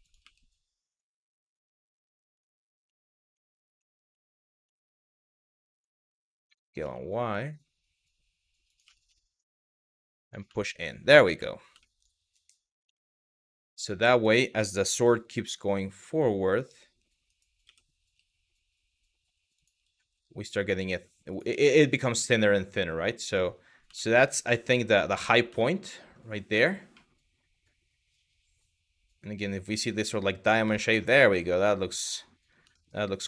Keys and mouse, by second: 1.1 click, 2.0 click, 2.6 middle click, 3.1 shift+middle click, 3.9 shift+middle click, 4.4 shift+middle click, 4.7 click, 6.1 s, 6.4 y, 8.3 click, 9.9 click, 10.4 shift+middle click, 11.1 shift+middle click, 11.5 shift+middle click, 12.6 shift+middle click, 13.2 click, 14.5 g, 14.8 y, 19.2 click, 20.9 click, 21.3 middle click, 23.6 shift+middle click, 25.3 shift+middle click, 26.7-30.1 middle drag, 30.4 shift+middle click, 30.8-32.0 middle drag, 32.4 shift+middle click, 32.8 Tab.